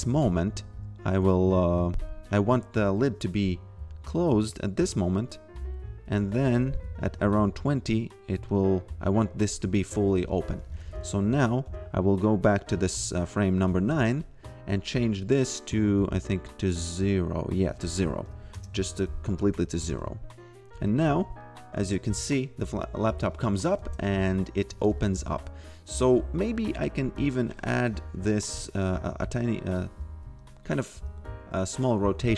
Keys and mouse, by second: 0.0-1.9 typing, 5.3 click, 6.1 f, 6.7 g, 8.5 click, 15.2 click, 17.6 click, 18.3 0, 18.6 Return, 19.4 click, 19.5-20.4 typing, 22.1 f, 23.8 shift+a, 24.1 f, 25.0 a, 25.4 f, 27.3 click, 31.0 g, 31.7 click.